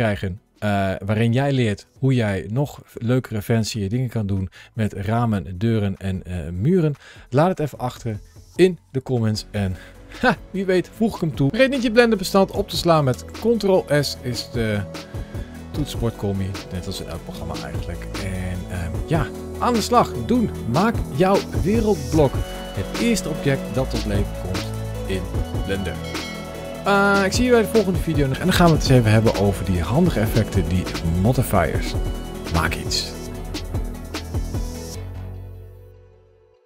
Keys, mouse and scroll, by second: 2.6 middle click, 9.1 scroll up 1, 9.5 shift+middle click, 10.2 middle click, 13.1 ctrl+s.